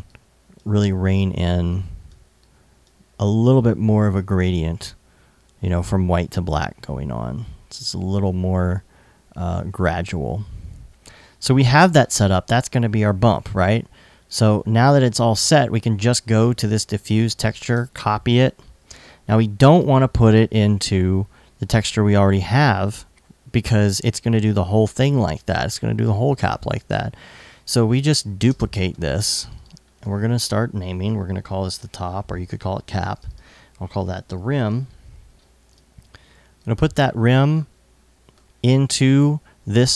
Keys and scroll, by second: 17.3 super+c, 30.7-31.6 typing, 33.5-34.6 typing.